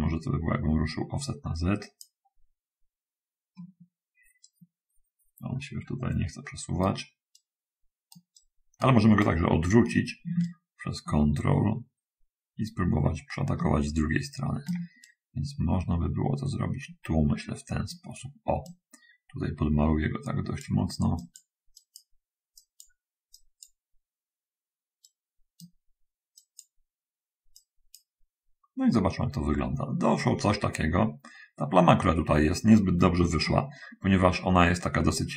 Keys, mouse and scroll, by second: 0.2-2.0 drag, 4.8-7.3 right drag, 7.6 right click, 8.7 right click, 10.8-15.1 ctrl+right drag, 15.4 ctrl+right click, 18.6-21.0 drag, 22.0 click, 22.9 click, 23.6 click, 25.3 right click, 26.7 click, 27.5 click.